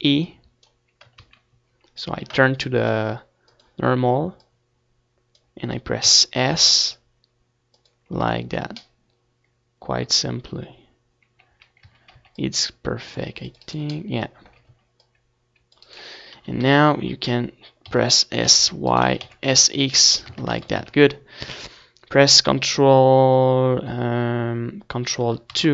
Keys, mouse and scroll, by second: 0.3 s, 2.3 z, 5.8 z, 6.1 a, 6.4 c, 8.2 right click, 8.3 click, 9.1 c, 10.3-12.2 right drag, 10.9 KP_1, 12.4 s, 13.6-14.8 right drag, 13.7 s, 14.8 middle click, 15.0 Tab, 15.2 ctrl+s, 15.5 z, 16.1 KP_3, 20.3 ctrl+2, 22.5 Tab, 23.1 a, 23.8 a.